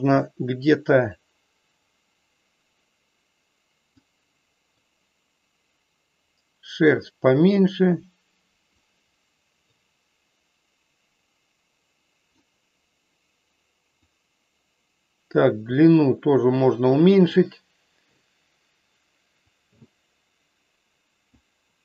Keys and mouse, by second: 1.4-4.0 drag, 4.7-8.6 drag, 9.6-12.2 drag, 14.0-17.5 drag, 19.6-21.2 drag.